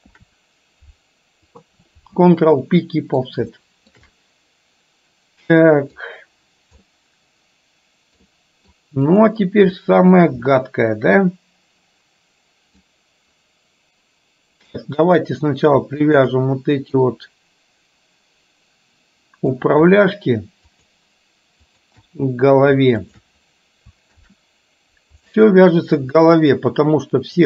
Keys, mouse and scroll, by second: 0.2 ctrl+p, 2.7 middle click, 3.7 shift+middle click, 4.2-6.1 middle drag, 6.9-8.8 middle drag, 10.6-12.9 middle drag, 15.2 click, 15.9 shift+click, 17.1-19.7 middle drag, 20.7 shift+click, 23.1 shift+click, 24.2 ctrl+p, 26.3-27.4 middle drag.